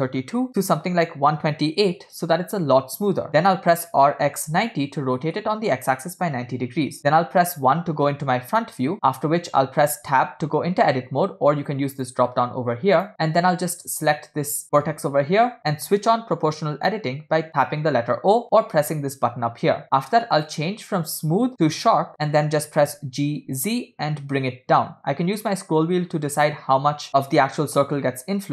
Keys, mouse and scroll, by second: 3.3 click, 4.3 r, 7.0 KP_1, 8.9 scroll up 6, 9.1 scroll down 3, 10.2 Tab, 12.0-13.1 drag, 13.9 click, 16.9 o, 20.5-22.2 drag, 22.7 g.